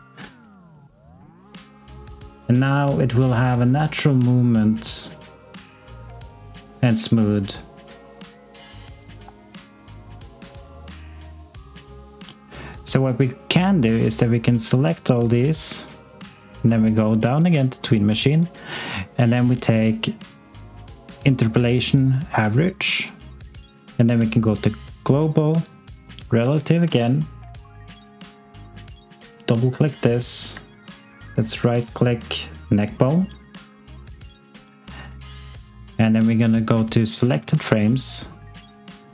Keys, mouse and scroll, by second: 16.0-18.4 scroll down 1, 18.4 click, 27.8 alt+click, 28.9 click, 30.1 alt+click, 31.1 right click, 31.8 alt+click, 36.9 click.